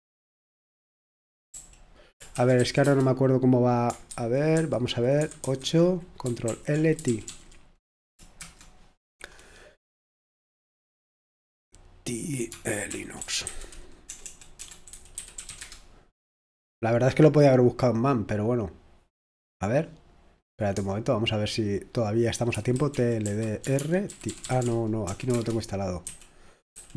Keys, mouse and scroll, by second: 2.3 ctrl+d, 2.8 c, 4.1-5.0 typing, 5.2 super+2, 5.4 super+3, 6.5 super+7, 7.0 s, 12.1 click, 12.5-16.0 typing, 19.4-22.5 drag, 22.3-26.9 typing.